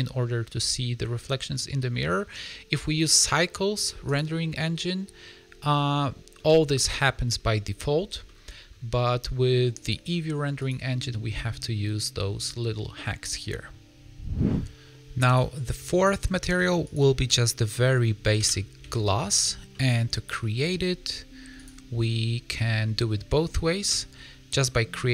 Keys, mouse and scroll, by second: 0.5 middle click, 2.9 click, 5.4-6.0 scroll down 5, 6.3 middle click, 8.2 middle click, 8.7 scroll up 2, 9.7 click, 13.4 middle click, 15.2 click, 15.9 shift+middle click, 16.8 click, 17.2 shift+middle click, 18.7 click, 19.6 KP_Decimal, 21.6 middle click, 21.6 click, 23.8 click.